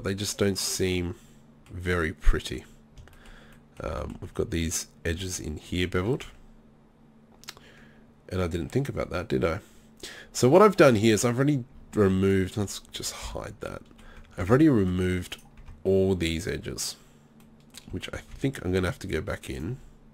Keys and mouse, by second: 1.6-2.1 middle drag, 3.2 middle click, 3.6-4.1 middle drag, 5.1 z, 5.8 z, 6.3 Tab, 12.0 Tab, 13.3 h, 14.4 Tab, 15.6 Tab, 17.4 click, 19.5 click.